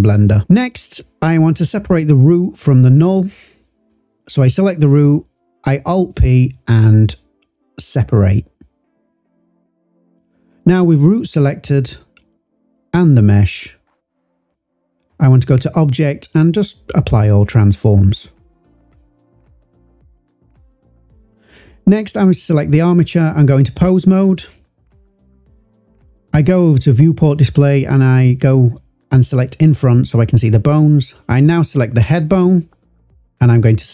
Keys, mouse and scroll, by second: 0.1 click, 1.0 click, 4.3 alt+p, 7.1 click, 8.5 Delete, 9.1 click, 10.6 click, 12.0 shift+click, 13.1 drag, 13.5 click, 14.6 shift+click, 15.5 click, 15.7-17.2 drag, 18.1 click, 20.2 click, 21.4-22.1 drag, 25.2 click, 26.0 click, 26.8 click, 28.1 scroll up 2, 28.8 click, 30.1 click, 33.1 s.